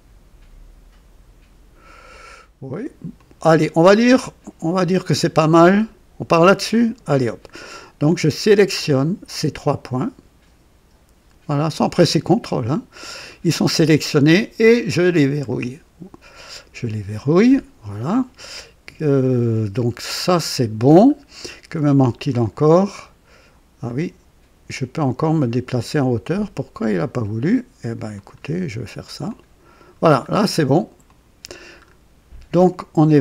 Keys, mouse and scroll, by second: 3.1-4.6 drag, 5.4 click, 6.7 click, 8.1 click, 9.2 click, 11.4 click, 12.0-12.4 scroll up 2, 12.6-13.3 right drag, 15.4 click, 17.2 scroll down 1, 19.7 click, 20.9 scroll down 2, 22.3 click, 23.8-26.1 drag, 28.1 click, 29.2 click, 30.2 scroll up 2, 31.0 click, 31.7 scroll up 2.